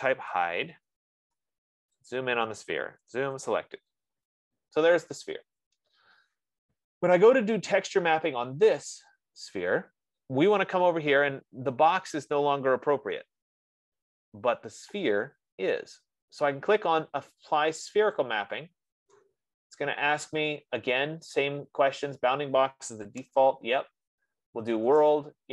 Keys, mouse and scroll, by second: 1.1 Return, 6.0 click, 6.0 middle click, 6.0 z, 18.6 click, 23.7 Return.